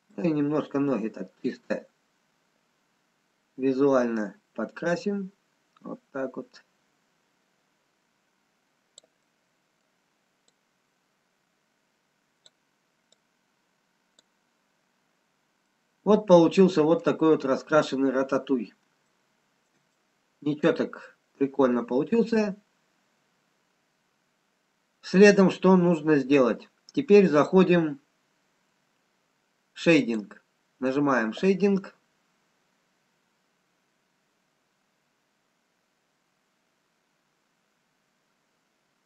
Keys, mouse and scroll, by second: 1.4 click, 9.5 middle click, 9.5 scroll up 1, 10.8 click, 15.4-16.2 scroll down 8, 16.3 middle click, 18.1-18.6 scroll up 2, 19.3 shift+middle click, 20.6 middle click, 22.7-23.6 scroll up 5, 23.6-24.5 scroll down 6, 24.5-25.0 scroll down 3.